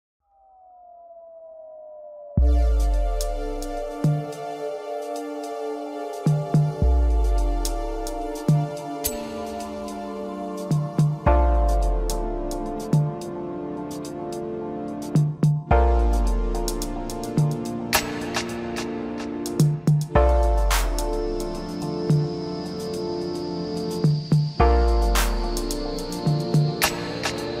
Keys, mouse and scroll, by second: 2.3-3.2 scroll down 1, 3.2-3.8 scroll down 1, 3.8 g, 10.6-11.3 scroll up 1, 11.4 scroll up 3, 11.6-14.7 middle drag, 16.4-16.7 scroll down 2, 16.7-18.2 middle drag, 18.2 s, 21.3 KP_1, 22.2-22.9 scroll up 1, 22.9 g.